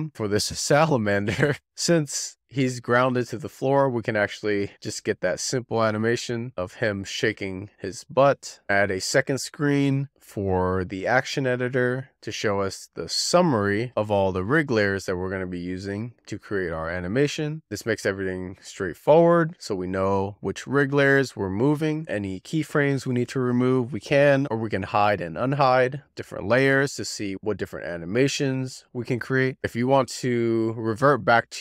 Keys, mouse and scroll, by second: 0.0-1.1 drag, 2.0 z, 2.2-2.5 shift+middle drag, 2.5 scroll down 2, 3.7 click, 7.9 z, 8.0 shift+middle click, 8.4 scroll up 1, 8.6-12.2 drag, 12.6-14.5 drag, 14.5-15.0 scroll down 1, 15.0-15.3 scroll down 1, 15.3-16.0 scroll up 1, 16.0-17.2 scroll up 1, 17.7 shift+middle click, 17.9-18.5 scroll up 1, 18.5-23.1 drag, 24.1-25.8 drag, 26.8 scroll up 2, 27.0-27.8 scroll down 1, 28.1 z, 28.3-29.4 drag, 31.2-31.6 drag.